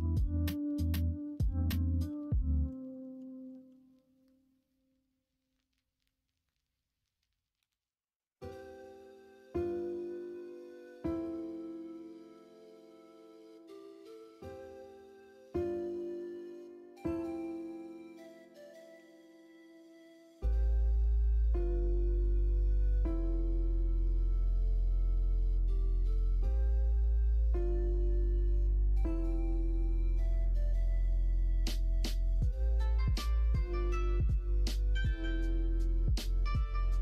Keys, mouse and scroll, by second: 20.5 3, 23.3 x, 24.0 x, 29.3 ctrl+z.